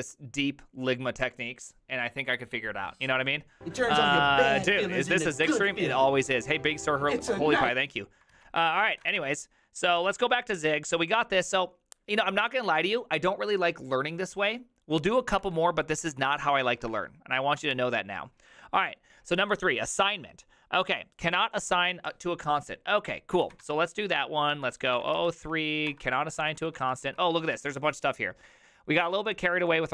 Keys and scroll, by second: 8.4 alt+{, 8.8-10.2 typing, 10.0 ctrl+a, 16.0 Up, 16.8 BackSpace, 17.0 BackSpace, 17.6 BackSpace, 17.8 Return, 23.5 ctrl+a, 23.7 1, 24.8 ctrl+p, 24.9-25.7 typing, 25.9 Return, 26.4 ctrl+d, 26.6 ctrl+d, 26.8 ctrl+d, 27.4 ctrl+u, 27.9 typing, 29.0-29.9 typing.